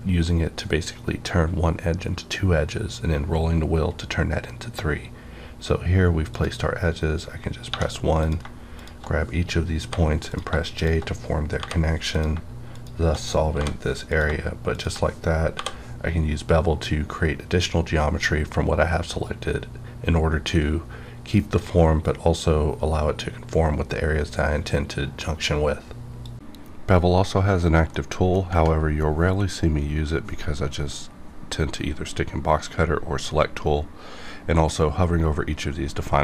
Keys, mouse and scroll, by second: 5.3-5.6 scroll up 1, 6.3 click, 7.6 1, 8.2 click, 8.4 click, 8.7 shift+click, 9.8 j, 10.2 click, 10.7 shift+click, 11.5 j, 12.1 click, 12.7 shift+click, 13.5 j, 14.1 click, 14.7 shift+click, 16.6 j.